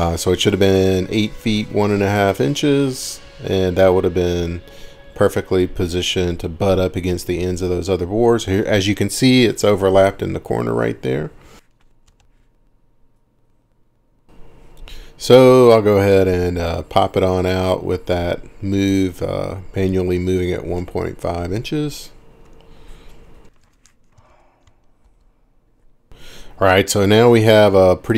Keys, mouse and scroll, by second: 0.6-1.5 scroll up 4, 2.3 middle click, 2.4-2.9 scroll up 4, 3.1-3.9 scroll down 4, 3.9 click, 4.2 scroll, 6.7 middle click, 10.8 middle click, 12.1 m, 21.8 click, 22.5-24.8 typing, 25.0 Return, 26.1 ctrl+shift+r, 26.1 middle click, 26.1 scroll, 28.0-28.1 scroll.